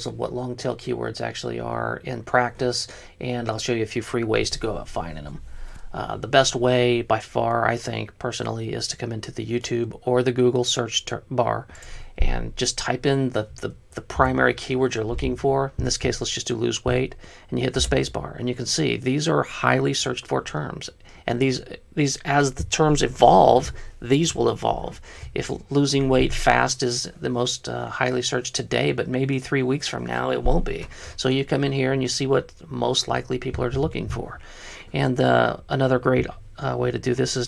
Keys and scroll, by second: 14.4 BackSpace, 18.0 space.